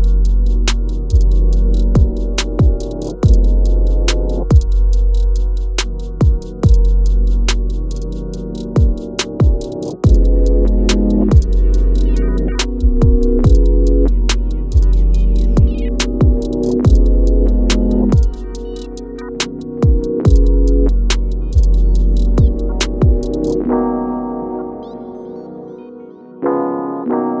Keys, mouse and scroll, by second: 0.3 shift+scroll up 1, 1.4 shift+scroll down 1, 2.7 click, 4.4 Caps_Lock, 4.5-6.4 typing, 8.7-10.5 drag, 14.3 click, 15.4-17.6 shift+drag, 17.6-20.5 drag, 20.5 scroll down 1, 20.8 click, 21.0 scroll up 1, 21.6 scroll down 1, 22.2 click, 23.3-23.7 scroll down 1, 24.3 click, 25.2-27.4 typing.